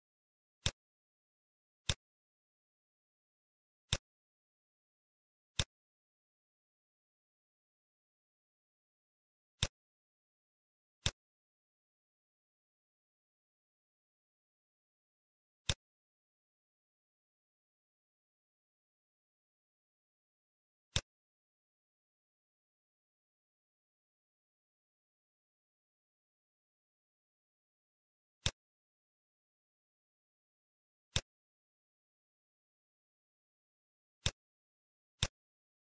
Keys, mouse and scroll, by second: 0.5 click, 3.8 click, 5.5 click, 7.7 scroll up 3, 8.6-9.3 scroll down 2, 9.6 click, 12.1-12.6 scroll down 1, 13.0 middle click, 14.4 middle click, 15.5 click, 19.6 scroll down 1, 20.9 click, 23.7 scroll down 3, 24.0 middle click, 24.5-24.9 scroll down 3, 24.8 middle click, 26.2 middle click, 27.1 scroll down 2, 27.4 middle click, 28.5 click, 29.8 scroll down 3, 29.9 middle click, 30.6 middle click, 30.9 scroll up 1, 31.0 click, 31.5-32.0 scroll up 4, 32.1 middle click, 32.5 scroll up 2, 32.9 middle click, 33.6 middle click, 34.2 click.